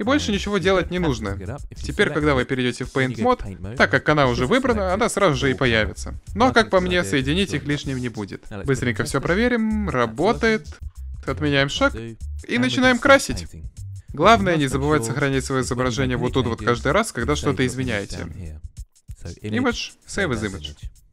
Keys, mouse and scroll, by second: 1.0-2.8 drag, 3.3 click, 3.3 typing, 6.0-8.0 drag, 8.3-10.3 drag, 10.3 ctrl+z, 18.3-19.9 drag.